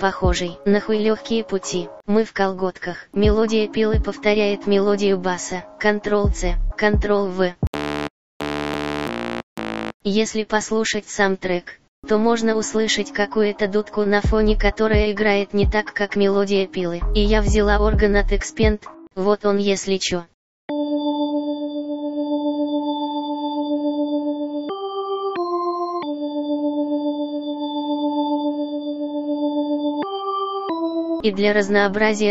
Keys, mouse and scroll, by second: 15.5 F1, 20.4 click, 31.3 F1.